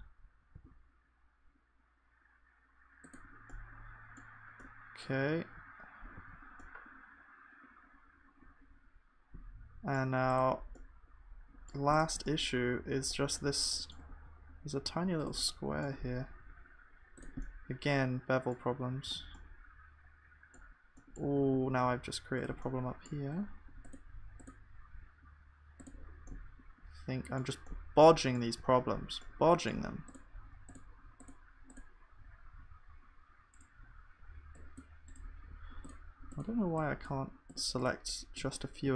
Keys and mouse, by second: 6.2 ctrl+s, 10.8 click, 10.9-19.7 middle drag, 16.3 g, 19.1 ctrl+s, 21.9 g, 25.0 g, 28.6 ctrl+s, 35.3-38.9 drag.